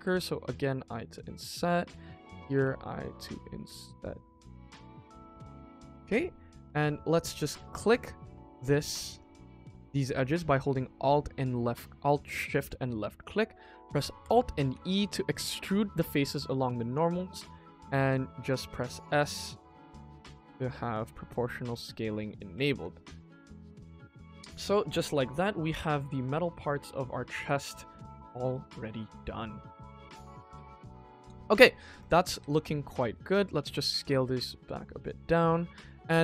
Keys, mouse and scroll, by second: 1.6 middle click, 2.1 click, 2.5 i, 4.8 middle click, 6.2 middle click, 6.6 click, 7.3 alt+click, 7.9 middle click, 9.0 alt+shift+click, 9.5 middle click, 10.1 middle click, 12.3 alt+shift+click, 12.8 middle click, 14.7 alt+e, 22.7 click, 23.7 middle click, 24.3-24.8 scroll down 3, 24.6-25.3 middle drag, 25.5 middle click, 25.6 middle click, 25.9-26.8 scroll up 2, 26.8-27.8 middle drag, 26.8-27.8 scroll up 1, 28.6 scroll up 1, 28.7 middle click, 29.3 shift+middle drag, 30.6 scroll down 2, 30.9 middle drag, 31.4 click, 31.9 click, 32.3 KP_1, 32.7 click, 33.0 shift+click, 33.4-33.8 scroll down 1, 33.8 s, 34.9 click, 35.2 middle click, 35.6-36.0 scroll up 2, 36.0 click.